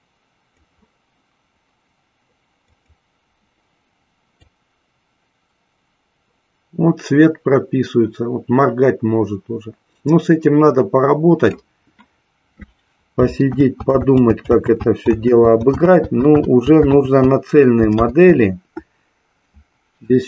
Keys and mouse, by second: 2.8 click, 4.8-12.0 drag, 16.0 ctrl+z, 18.7 ctrl+z.